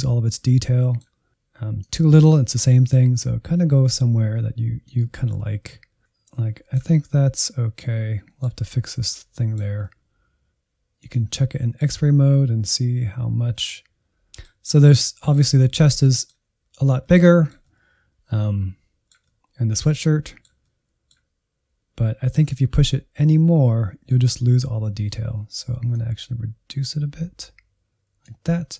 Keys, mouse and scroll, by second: 1.5 click, 2.1-2.4 scroll down 2, 2.6 scroll up 1, 2.7 middle click, 3.1-4.3 drag, 4.5 middle click, 4.9 click, 5.6 middle click, 6.0 Insert, 6.4-11.3 middle drag, 11.3 click, 11.6 middle click, 11.8 alt+z, 12.0-13.6 middle drag, 14.9-23.5 middle drag, 23.5 alt+z, 23.8-25.9 middle drag, 25.9-28.7 drag.